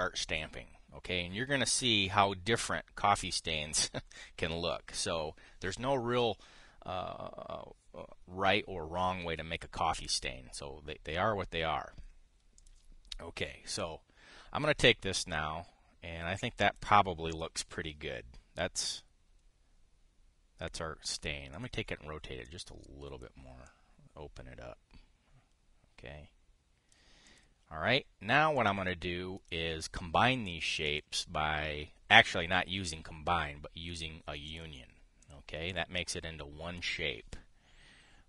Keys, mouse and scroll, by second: 13.3 click, 14.5-17.6 drag, 18.0 click, 21.8 click, 22.2 click, 23.2 click, 24.4-27.7 drag, 28.0 click, 29.2-30.3 drag, 31.5 click, 35.2 click, 35.9 click, 36.4-37.6 drag.